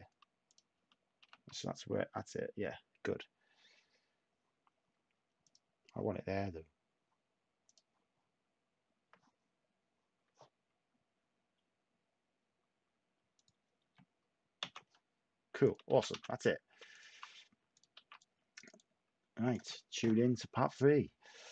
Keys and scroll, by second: 1.1 a, 14.6 s, 15.9 a, 17.5-18.2 typing.